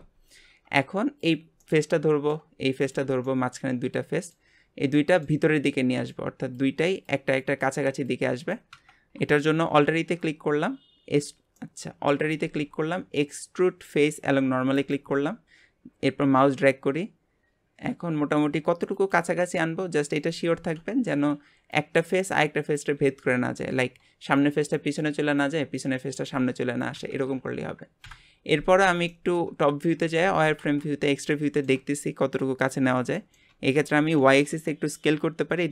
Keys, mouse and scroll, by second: 0.1 Tab, 0.5 Tab, 1.2 click, 1.6-2.8 middle drag, 2.8 shift+click, 3.2-4.5 middle drag, 4.5-5.0 scroll up 1, 5.0 middle click, 5.4-5.8 scroll up 1, 5.8-9.0 middle drag, 9.9 alt+e, 11.6 middle click, 12.4 alt+e, 19.6 middle click, 20.5 alt+z, 28.0 KP_7, 29.1 shift+middle click, 29.6-30.2 scroll up 2, 30.2 alt+z, 30.6 alt+z, 30.9 scroll up 2, 31.3 shift+middle click, 31.9-32.8 scroll up 1, 32.8 scroll down 1, 33.2 shift+middle click, 33.8 s.